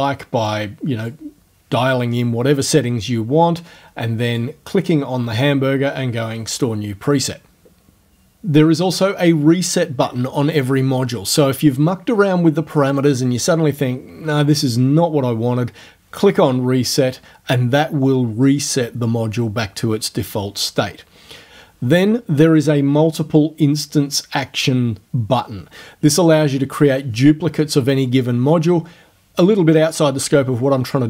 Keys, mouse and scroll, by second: 0.5 click, 4.3 click.